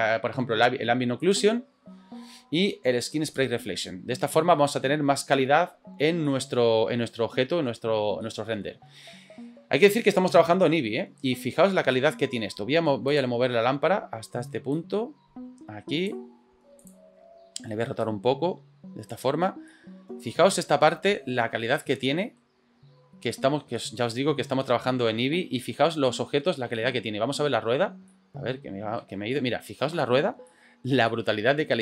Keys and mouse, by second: 1.3 click, 3.3 click, 4.5 middle click, 6.3-7.7 middle drag, 8.2 shift+middle click, 11.9 middle click, 14.9-16.1 drag, 16.9 click, 18.0-19.2 drag, 19.7-20.3 middle drag, 20.9-21.2 shift+middle drag, 21.8-22.4 shift+middle drag, 23.4 middle click, 23.8-24.1 shift+middle drag, 25.4-25.8 shift+middle drag, 26.1 click, 26.2 middle click, 26.7 shift+middle drag, 28.2-29.0 shift+middle drag, 29.4-29.9 ctrl+middle drag, 30.5-30.9 ctrl+middle drag, 31.1-31.8 shift+middle drag.